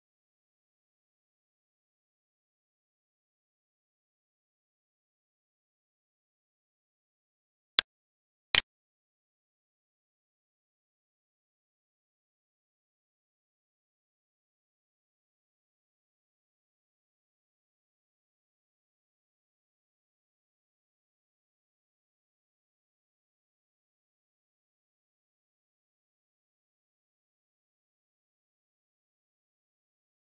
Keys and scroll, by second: 0.0 ctrl+Down, 15.0 ctrl+space, 22.5 space.